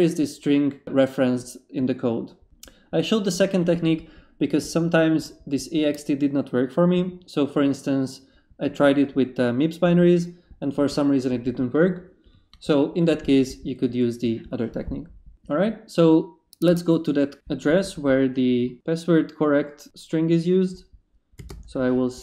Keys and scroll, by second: 21.4 s, 21.5 space.